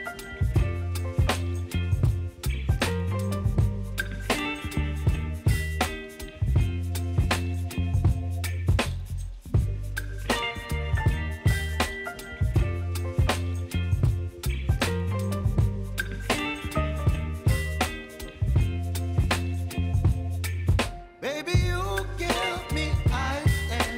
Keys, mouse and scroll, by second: 0.6-2.0 typing, 3.5 click, 7.6 scroll down 1, 8.3-11.2 drag, 11.2 ctrl+alt+Home, 12.0 r, 13.5-17.9 drag, 17.9 v, 18.4-20.5 drag, 23.4-23.9 typing.